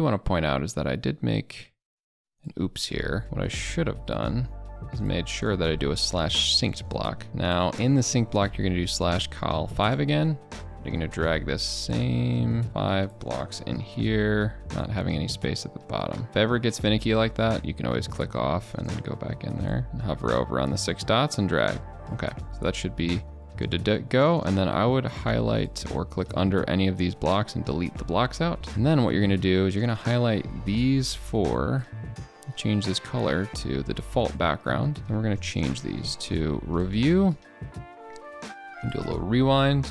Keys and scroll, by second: 35.7 ctrl+BackSpace, 37.3 ctrl+a, 37.6 ctrl+b.